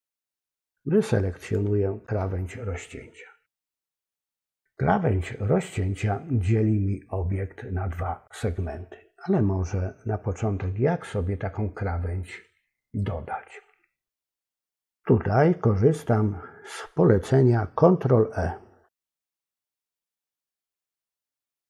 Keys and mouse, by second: 20.5 ctrl+e.